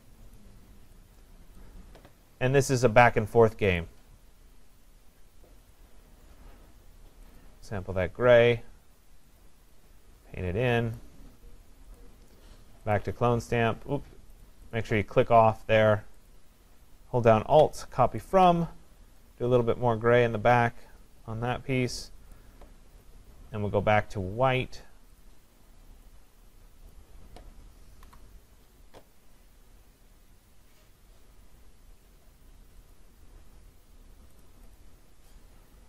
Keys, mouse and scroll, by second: 0.4 click, 1.6 click, 3.8 click, 5.8 click, 7.4 click, 9.4 click, 11.0 click, 12.0 click, 13.0 click, 14.4 click, 14.8 click, 16.3 click, 18.4 alt+click, 19.5 alt+click, 22.4 click, 24.5 click, 25.3 click, 26.9 click, 28.0 Delete, 32.9 click, 34.4 click, 34.8 click.